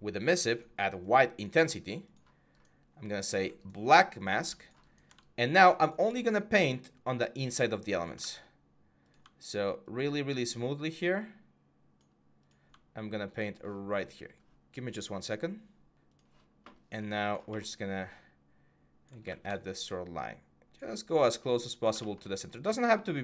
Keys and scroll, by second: 8.0 ctrl+z, 19.0 ctrl+z.